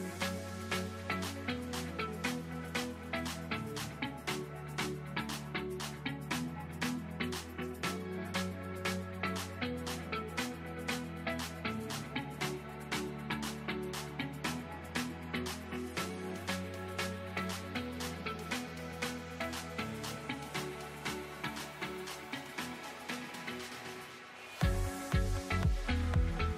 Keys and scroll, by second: 3.3 ctrl+z, 4.9 ctrl+z, 7.6 space, 15.6 ctrl+[, 23.3 space.